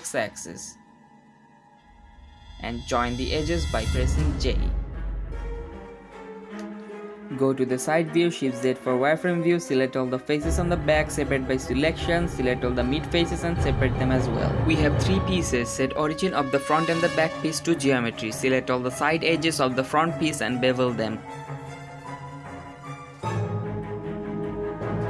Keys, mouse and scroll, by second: 0.3 s, 2.3 middle click, 2.5 1, 3.3 shift+click, 4.4 j, 4.8 shift+click, 5.4 j, 5.5 middle click, 5.6 click, 6.5 click, 7.2 j, 7.3 3, 7.7 KP_1, 9.4 shift+z, 9.7 click, 11.1 p, 11.8 click, 12.2 Tab, 12.6-13.6 drag, 13.6 p, 14.4 click, 14.4 g, 14.7 click, 14.8 g, 15.2 click, 15.3 g, 15.7 click, 15.8-17.3 right drag, 17.3 click, 17.4-18.5 right drag, 18.5 2, 19.1 alt+shift+click, 19.3 shift+middle click, 19.8 middle click, 19.8 alt+shift+click, 20.3 shift+middle click, 20.5 alt+shift+click, 20.8 shift+middle click, 21.2 alt+shift+click, 21.4 shift+middle click, 21.5 ctrl+b.